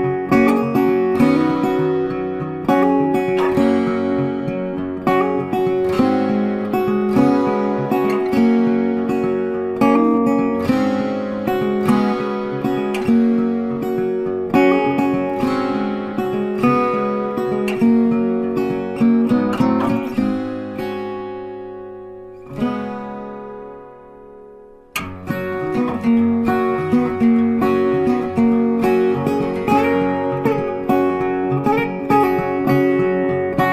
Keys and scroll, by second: 0.1 ctrl+z, 18.4 ctrl+z, 30.6 ctrl+z.